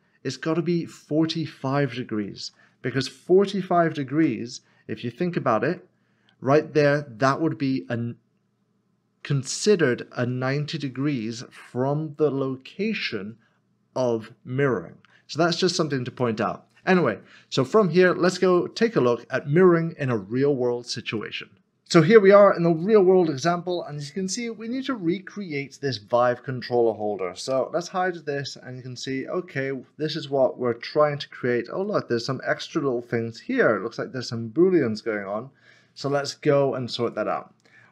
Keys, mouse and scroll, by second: 2.2-3.8 typing, 4.1 Return, 5.1 middle click, 13.1 middle click, 15.5 scroll down 1, 16.2 middle click, 21.7 scroll down 1, 26.0 scroll down 1, 26.1 click, 28.1 middle click, 30.2-31.0 scroll up 1, 31.3 middle click, 31.8 shift+middle click, 36.1 shift+middle click, 37.0 click.